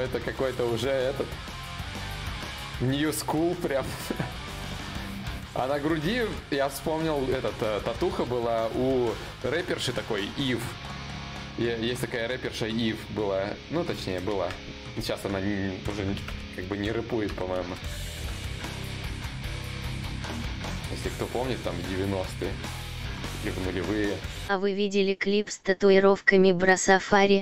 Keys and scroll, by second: 2.1 d, 6.4 d, 6.7 d, 15.4-17.2 typing, 18.4 s, 19.2 shift+d, 20.4 s, 22.0 s, 23.0 s, 25.6 d, 26.8 d.